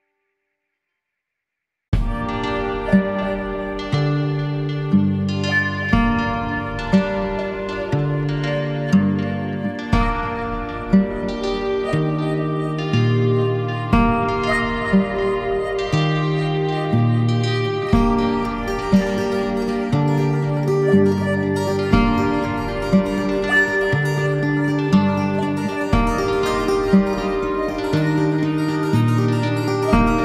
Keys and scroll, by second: 3.1 Delete, 4.3 Delete, 9.7 ctrl+z, 11.2 ctrl+0, 19.0 ctrl+z.